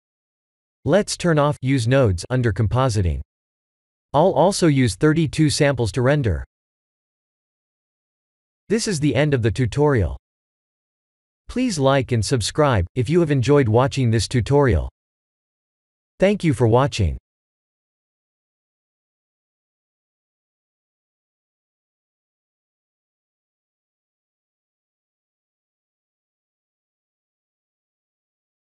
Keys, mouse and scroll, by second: 1.2 click, 2.4 click, 2.9 click, 4.2 click, 5.5 click, 6.8 click, 7.2 ctrl+s.